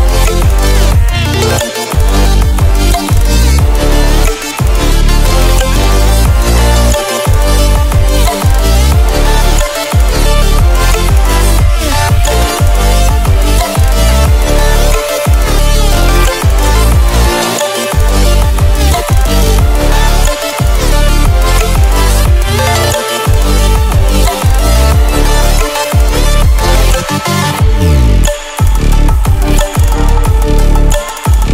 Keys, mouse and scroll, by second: 2.3 click, 3.4 ctrl+w, 15.1 ctrl+w, 19.5 click, 25.0 click, 26.0-27.1 ctrl+alt+scroll down 2, 27.1-29.1 drag, 29.7 space, 29.8 click, 30.1-31.5 space.